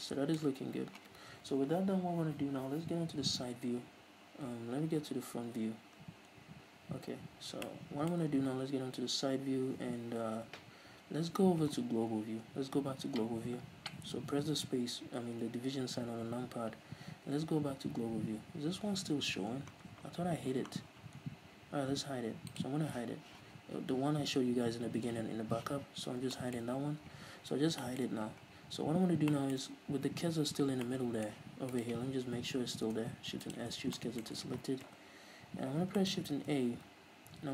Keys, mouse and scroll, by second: 0.8 ctrl+s, 3.8 KP_3, 4.7-5.4 scroll down 2, 5.4 KP_1, 7.8 middle click, 8.9 KP_3, 13.6 KP_Divide, 15.3 KP_3, 16.3-16.9 scroll up 1, 19.3 scroll down 1, 22.7 click, 26.1-26.5 scroll up 2, 26.5-31.9 shift+middle drag, 26.9-27.6 scroll up 2, 27.6-27.9 scroll down 2, 28.6-29.3 scroll down 2, 29.3 scroll down 1, 31.9 right click, 32.5 Tab, 33.0 shift+s, 34.0 Tab, 34.2-36.5 middle drag, 35.0 KP_3, 35.8 scroll down 2, 36.5 shift+a.